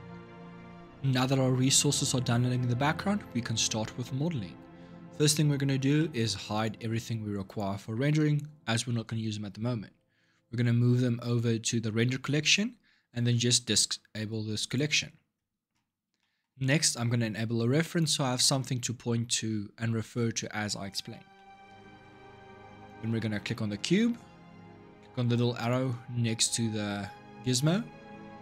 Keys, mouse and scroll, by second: 0.0 ctrl+shift+Up, 5.0-6.3 middle drag, 6.3 click, 7.2 shift+click, 14.4 click, 16.0-17.6 shift+middle drag, 17.6 click, 18.2-19.6 middle drag, 19.6 scroll up 2, 21.1-22.5 shift+middle drag, 22.5 click, 22.9-25.4 shift+middle drag, 25.4-28.4 drag.